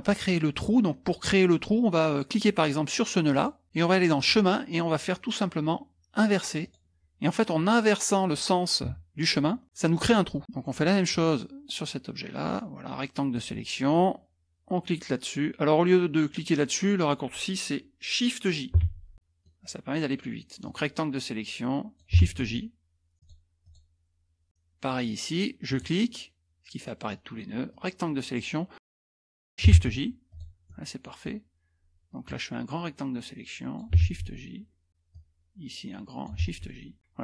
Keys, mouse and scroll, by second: 3.3 click, 4.2 click, 6.6 click, 9.6 click, 11.1-13.7 drag, 18.8 shift+j, 19.1 middle click, 19.1-19.7 scroll down 1, 20.6-22.1 drag, 22.2 shift+j, 23.2 click, 25.7 click, 27.7-29.3 drag, 29.7 shift+j, 30.3 click, 30.7 middle click, 30.7-31.4 scroll up 1, 32.3-33.9 drag, 34.0 shift+j, 35.1-36.3 drag, 36.4 shift+j.